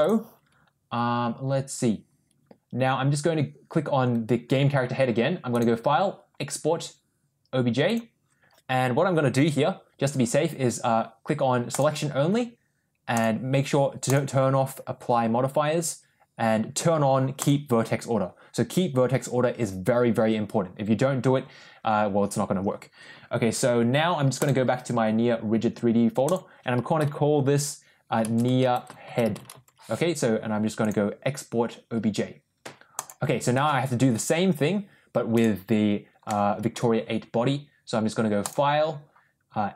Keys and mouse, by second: 5.6-8.0 drag, 35.2 click, 36.2 middle click, 38.3-39.7 drag.